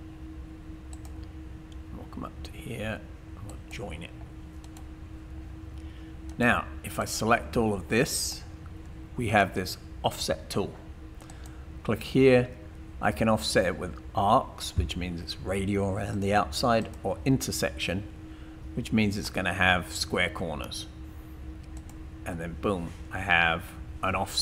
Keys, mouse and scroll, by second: 0.9 click, 2.8 typing, 6.4 right click, 7.0 click, 11.3 click.